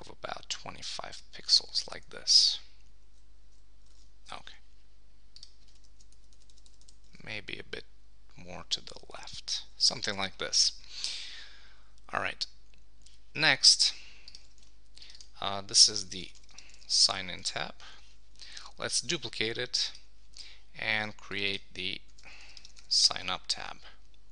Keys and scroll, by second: 2.8 Down, 3.4 Up, 3.9 super+s, 6.1 Left, 14.6 super+g, 17.4 Return, 23.0 Return.